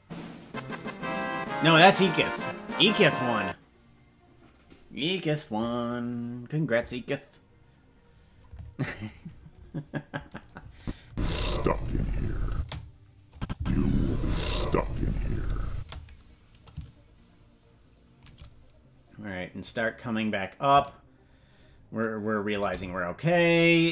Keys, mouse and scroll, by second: 10.8 click, 11.0 space, 12.5 space, 13.3 click, 13.5 space, 15.7 space, 16.6-18.2 drag, 19.6-22.6 drag, 23.3 right click.